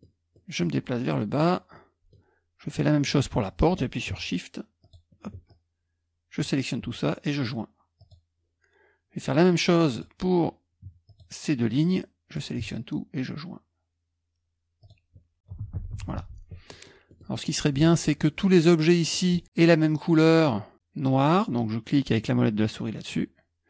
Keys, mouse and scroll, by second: 8.0 click, 9.9-11.0 drag, 11.1 shift+click, 11.9 click, 14.8 click, 15.6 KP_Subtract, 15.8 KP_Subtract, 17.2 middle click, 17.6-19.0 scroll up 1, 19.0 click, 19.4-19.8 scroll up 1, 19.8 click.